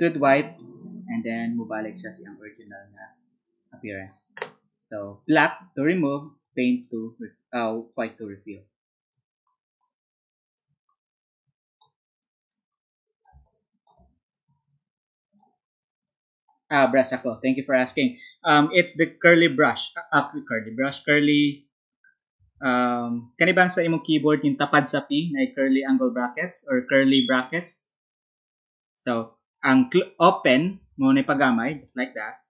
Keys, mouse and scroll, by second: 7.4-17.5 drag, 13.4 space, 23.1 ctrl+z.